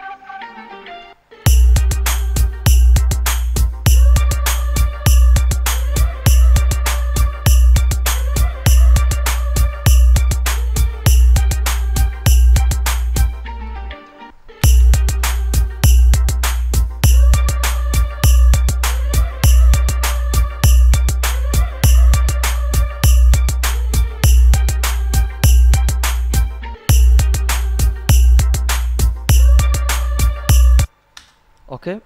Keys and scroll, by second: 1.3 space, 14.5 space, 31.1 space.